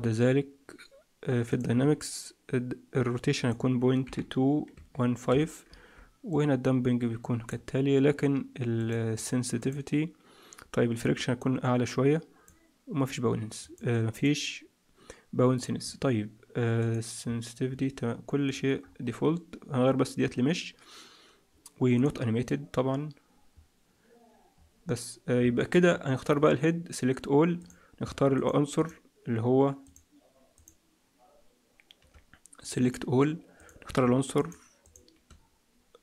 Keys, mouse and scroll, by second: 1.4 click, 1.6-2.1 scroll down 3, 3.3 click, 6.2 click, 8.7 click, 9.1 click, 9.5 click, 11.1 click, 13.5 click, 14.1 click, 16.7 click, 17.1-18.1 scroll down 5, 17.6-18.1 scroll up 1, 18.4 click, 18.7-19.8 scroll up 2, 19.8-20.3 scroll up 2, 25.5 shift+middle click, 26.3 right click, 28.3 shift+click, 29.3 shift+click, 32.7 right click, 34.3 shift+click.